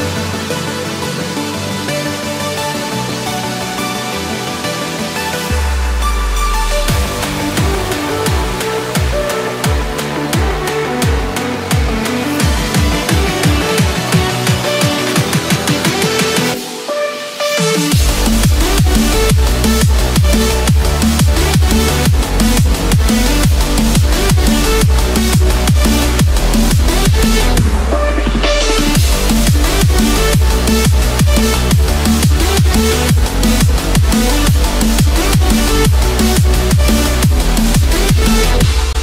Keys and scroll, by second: 19.4 F4.